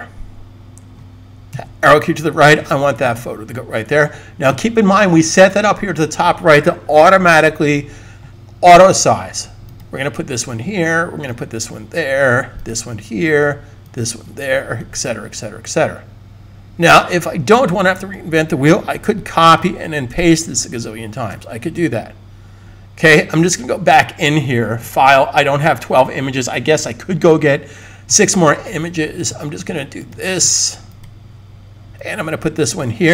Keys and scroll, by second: 0.0 Left, 1.4 Right, 18.8 super+c, 20.3 super+v, 21.5 super+z.